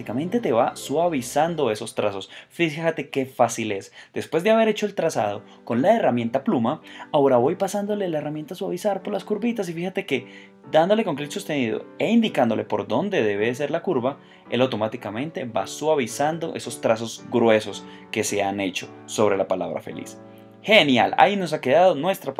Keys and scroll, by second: 1.2 space, 5.0 space, 10.1 space, 21.1 space.